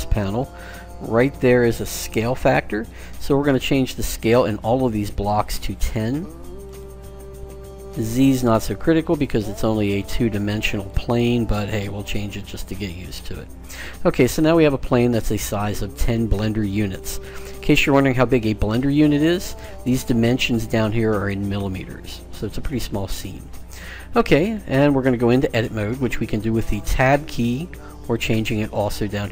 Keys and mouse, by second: 4.4-6.1 drag, 7.7-9.4 drag, 11.0-12.9 drag, 14.4-20.0 middle drag, 27.4 Tab.